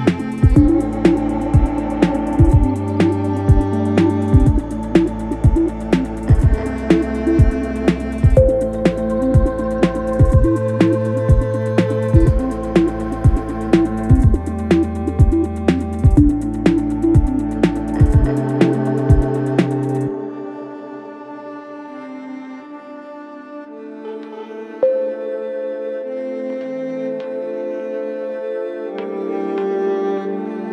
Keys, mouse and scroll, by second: 27.6 Return.